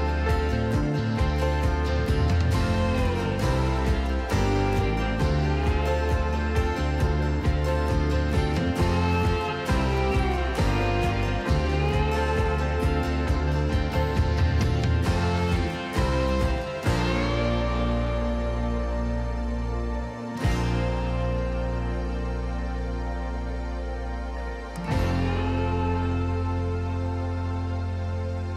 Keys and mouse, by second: 1.2 g, 1.4 z, 2.3 click, 8.6 g, 8.9 z, 15.1 click, 15.8-16.3 drag, 18.6-19.7 drag, 20.4 click, 22.7 click, 24.2-25.3 drag, 27.4 click, 28.0 Tab.